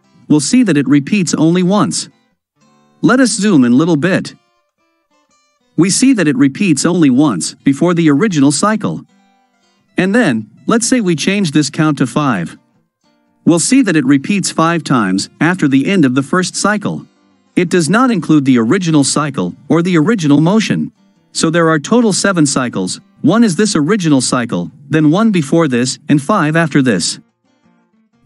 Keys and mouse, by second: 2.6-3.8 ctrl+middle drag, 10.7-11.9 drag.